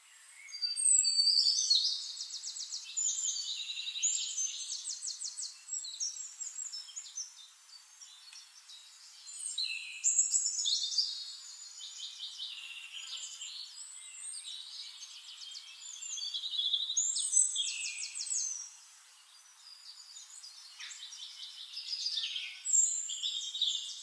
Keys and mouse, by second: 1.1-4.4 drag, 5.6 click, 7.7-10.4 drag, 12.9-16.7 drag, 17.3-20.4 drag, 22.0 click, 23.3 ctrl+d, 23.9-24.0 shift+drag.